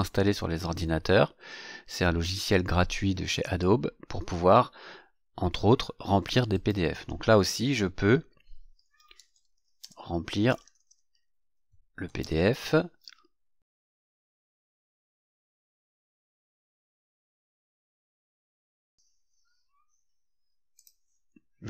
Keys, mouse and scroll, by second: 6.5 click, 8.5-12.6 typing, 18.2 click, 20.7 click.